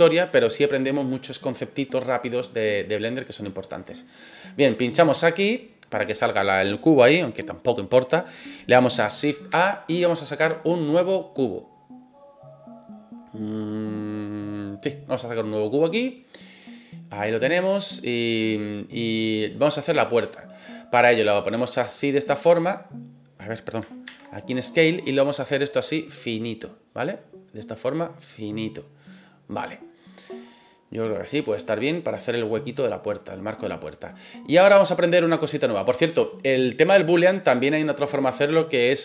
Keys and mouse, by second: 3.7 click, 4.9 middle click, 9.5 shift+a, 16.3-16.7 middle drag, 17.3-17.8 drag, 17.9-18.8 middle drag, 21.2 click, 21.6 middle drag, 22.6 click, 24.0 ctrl+z, 25.3-28.8 drag, 29.1 middle click, 30.6-31.7 middle drag, 32.7 click, 33.4-34.0 middle drag, 35.0-35.8 middle drag.